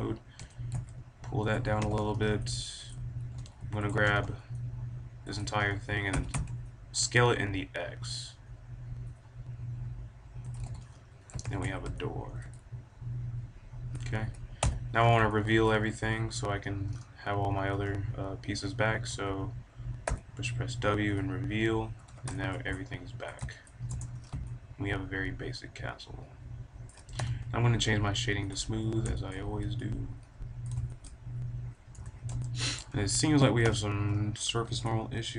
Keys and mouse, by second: 0.3 g, 1.5 click, 1.6 a, 1.7 b, 3.3 b, 3.8 middle click, 3.8 a, 4.0 b, 4.7 click, 5.5-7.3 drag, 6.0 s, 10.5-12.2 drag, 10.6 a, 11.3 KP_5, 11.5 z, 14.5 middle click, 14.5 a, 15.4 click, 16.1 right click, 17.0-19.0 middle drag, 19.0 a, 20.0 w, 21.9 a, 22.3-23.8 middle drag, 23.8 Tab, 24.1-26.2 drag, 26.2 middle drag, 27.1 t, 28.4-29.7 drag, 30.0-31.0 middle drag, 31.9 Tab, 32.7-33.4 middle drag, 33.6 t.